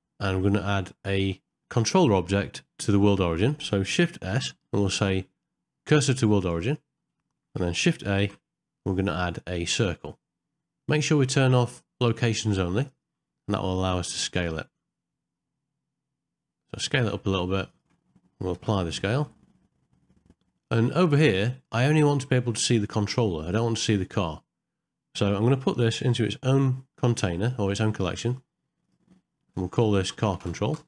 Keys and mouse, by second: 0.8 middle click, 1.6 ctrl+middle click, 1.9 shift+middle click, 3.1 shift+middle click, 4.3 shift+s, 8.2 shift+a, 11.2-13.1 drag, 18.6 ctrl+a, 21.9 shift+middle click.